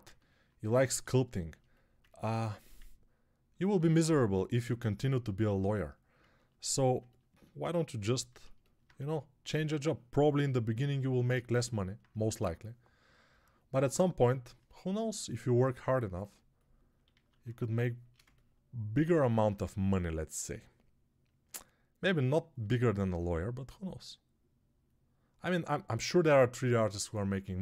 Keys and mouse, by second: 8.8 1, 17.0 alt+q, 22.0-27.6 drag.